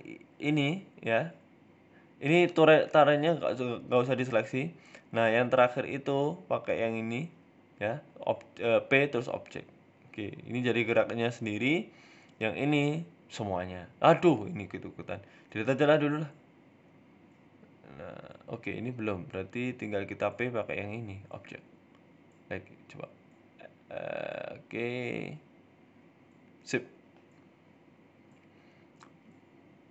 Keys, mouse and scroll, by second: 0.2 shift+middle click, 0.5 middle click, 0.9 g, 2.6 shift+right click, 3.2 g, 5.8 shift+right click, 7.5 ctrl+p, 8.3 right click, 8.7 r, 11.1 middle click, 11.4 KP_1, 11.6 Tab, 12.3 right click, 12.6 right click, 12.9 right click, 13.3 g, 14.6 shift+right click, 15.2 right click, 15.5 Delete, 15.7 scroll down 3, 15.9 middle click, 16.3-16.7 scroll down 2, 16.4 middle click, 16.7 right click, 17.1 g, 17.7-18.1 scroll up 8, 18.2 right click, 19.2 g, 20.1 shift+right click, 20.7 ctrl+p, 21.8 right click, 22.3 h, 22.8 ctrl+z, 23.2 right click, 23.5 right click, 23.9 g, 24.8 scroll down 5, 25.0 middle click, 25.4 scroll up 3, 25.6 middle click, 27.1 scroll down 3, 27.4 right click, 28.2 right click, 28.6 KP_3, 29.2 shift+middle click, 29.2 KP_1.